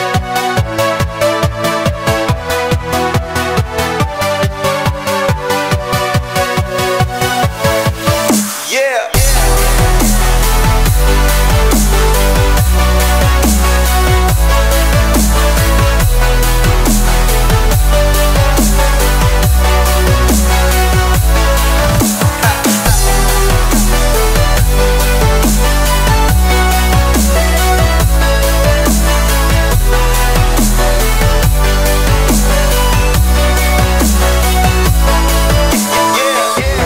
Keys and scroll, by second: 10.4 v, 15.7 alt+super+space, 15.8 alt+super+space, 15.9 alt+super+space, 17.0 Tab, 18.0 super+space, 18.1 super+space, 21.3-23.7 typing, 26.3 Delete, 27.4-30.5 typing, 28.5 super+space, 28.9 super+space, 30.5 alt+super+space, 30.6 alt+super+space, 30.7 alt+super+space, 35.6 space.